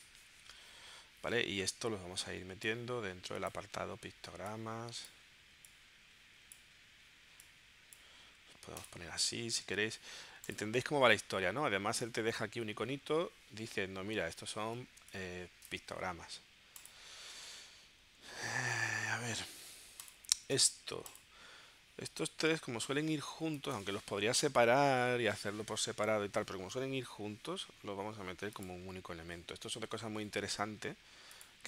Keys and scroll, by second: 0.1 Return, 15.1 space, 23.4 space.